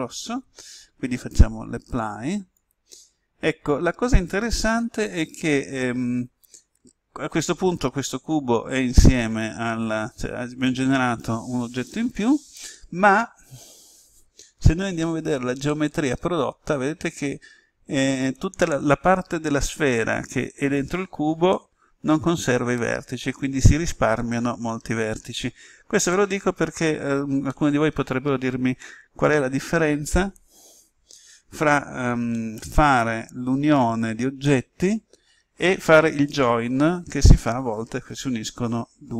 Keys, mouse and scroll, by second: 13.1-14.8 scroll up 1, 14.9 z, 15.6-24.1 middle drag, 26.2-26.7 scroll down 1, 27.4-39.1 middle drag.